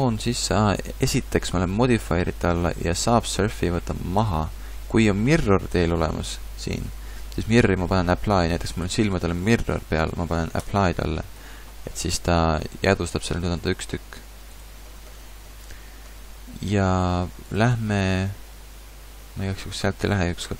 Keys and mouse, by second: 13.3 g, 15.2 a.